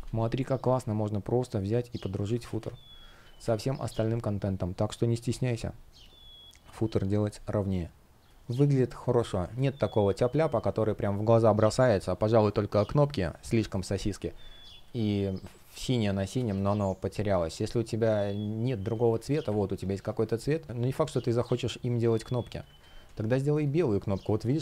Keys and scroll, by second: 0.4 shift+super+z, 2.0 super+z, 3.1 space, 7.1 shift+o, 8.2 space, 16.1 space, 20.6 super+c, 22.4 super+v, 22.8 Return.